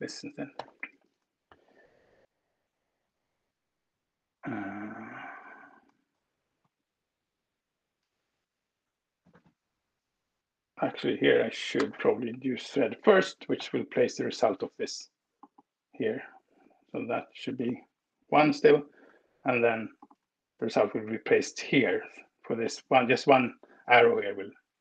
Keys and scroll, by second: 0.2 shift+8, 1.1 -, 2.0 shift+<, 3.4 space, 6.6 ctrl+alt+Right, 9.3 Down, 9.4 Down, 10.2 Up, 11.3 BackSpace, 17.0 ctrl+alt+Return, 20.4 ctrl+w, 20.8 BackSpace.